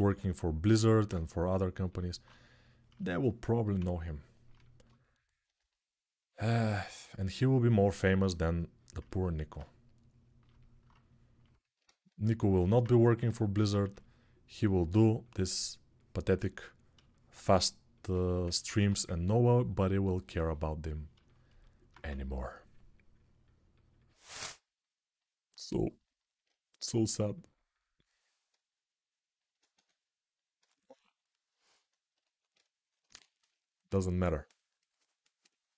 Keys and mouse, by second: 3.6 ctrl+z, 11.6 ctrl+z, 12.3-18.2 alt+right drag, 13.6 2, 18.5 1, 21.2-35.7 alt+drag, 21.2-21.7 typing, 29.5 1.